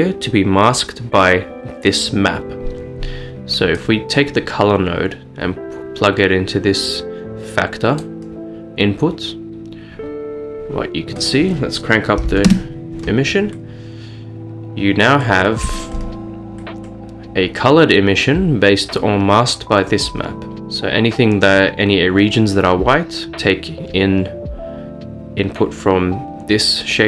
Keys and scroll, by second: 12.4 typing, 12.5 Return, 16.0 typing.